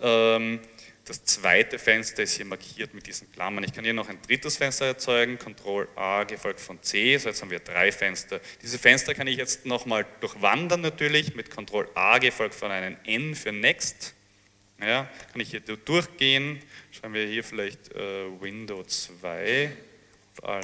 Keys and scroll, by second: 5.6 ctrl+a, 6.5 ctrl+c, 13.2 ctrl+a, 13.9 ctrl+n, 14.8-20.6 typing.